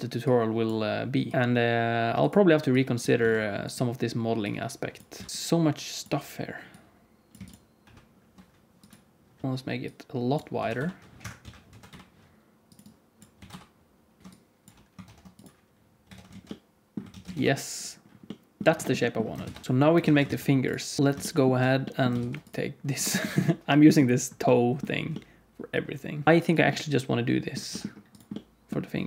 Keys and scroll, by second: 1.3 s, 5.1 s, 7.3 x, 7.8 Escape, 7.8 ctrl+e, 7.8 4, 10.5 s, 11.3 q, 11.6 s, 13.3 s, 14.2 ctrl+e, 14.2 ctrl+z, 14.2 g, 15.0 ctrl+e, 16.0 Tab, 16.2 alt+z, 17.0 alt+a, 17.3 ctrl+s, 19.4 ctrl+s, 20.0 alt+a, 20.2 ctrl+s, 21.0 ctrl+s, 21.0 alt+z, 22.1 ctrl+s, 26.2 KP_1, 26.2 g, 27.6 g.